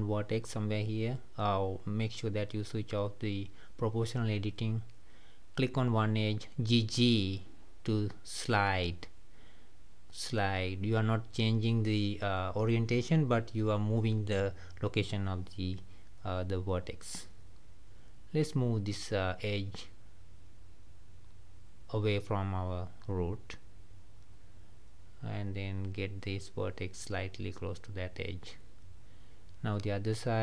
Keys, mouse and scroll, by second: 0.0 g, 2.9 o, 4.8 g, 6.4-7.9 middle drag, 7.9 click, 8.9 g, 11.2 click, 11.4 g, 13.6 click, 13.8 g, 14.9 click, 15.4 g, 16.9-17.3 scroll up 3, 17.5-18.8 middle drag, 18.8 click, 21.2 shift+click, 22.5 g, 24.5 click, 25.0 g, 26.9 click, 27.2 g, 28.6 middle click, 29.5 scroll down 2, 29.8-30.4 middle drag.